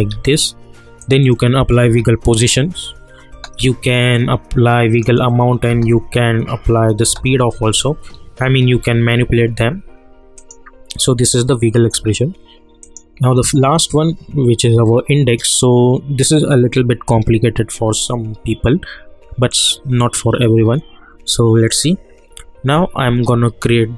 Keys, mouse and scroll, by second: 1.0 click, 1.8 space, 4.1-5.7 drag, 5.7 space, 8.7 ctrl+z, 10.4 click, 12.8 click, 19.5 click, 23.0-23.9 shift+drag.